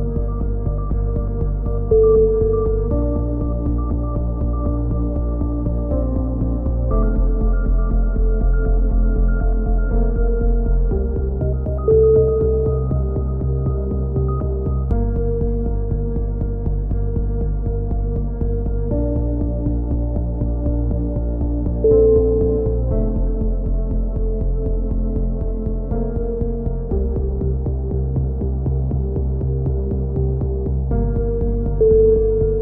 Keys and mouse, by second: 2.9-4.0 drag, 9.2 ctrl+r, 11.1 b, 13.4 click, 13.6 middle click, 13.7 click, 14.3-15.9 middle drag, 15.4 z, 15.7 z, 16.3 c, 17.5 click, 17.9 x, 19.4 a, 19.5 z, 20.1-21.1 drag, 24.2-25.9 drag, 25.2 z, 25.9 KP_3, 27.0 c, 29.2-30.2 right drag, 31.7-32.6 middle drag.